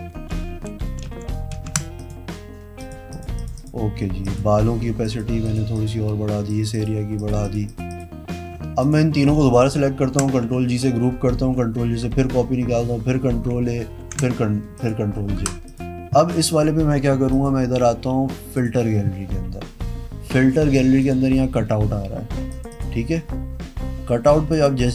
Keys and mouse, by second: 0.2 ctrl+z, 0.4 ctrl+z, 0.7 ctrl+z, 1.0 ctrl+z, 1.7 ctrl+z, 2.2 click, 3.0 click, 3.3 click, 3.5 click, 3.8 click, 4.4 click, 5.2 click, 5.7 click, 5.9 click, 6.7 click, 6.9 click, 7.9 click, 8.1 click, 9.0 shift+click, 10.2 ctrl+g, 11.6 ctrl+j, 12.2 ctrl+e, 13.7 ctrl+a, 14.2 ctrl+j, 15.0 click, 15.6 Pause, 15.9 click, 17.5 click, 18.7 click, 21.2 click.